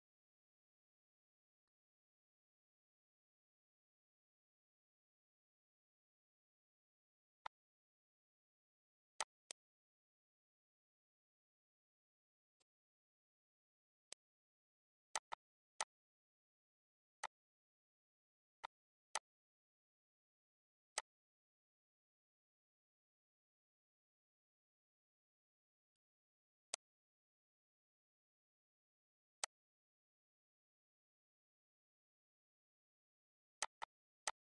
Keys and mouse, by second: 0.7 click, 2.7 click, 4.3 click, 6.3 click, 8.2 click, 10.8 ctrl+s, 11.6 click, 12.9 click, 13.7 click, 14.3 click, 15.1 click, 15.6 click, 17.1 click, 17.6 click, 19.6 click, 21.9 click, 24.9 click, 25.7 click, 28.7 click, 30.4 click, 32.7 click, 33.3 click, 33.8 click.